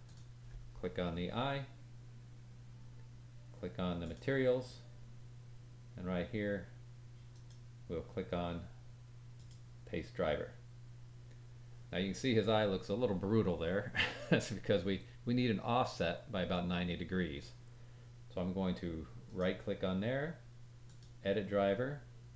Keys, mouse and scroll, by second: 4.0 click, 4.0 middle click, 4.0 right click, 7.3 right click, 19.2 right click.